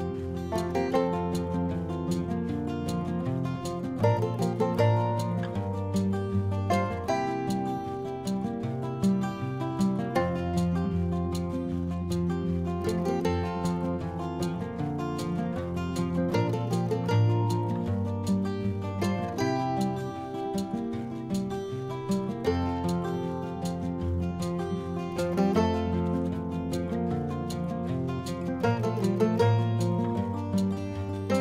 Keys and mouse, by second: 0.4 a, 1.7 g, 2.0 y, 3.3 click, 4.4 click, 4.9 click, 7.7 click, 8.6 click, 10.6 middle click, 11.7 click, 13.9 g, 14.1 z, 15.0 click, 15.7 a, 16.2 click, 18.1 g, 18.6 y, 21.1 click, 21.5 middle click, 22.4 click, 22.7 middle click, 23.4 click, 24.2 e, 25.9 click, 26.5 r, 29.3 click, 29.8 s.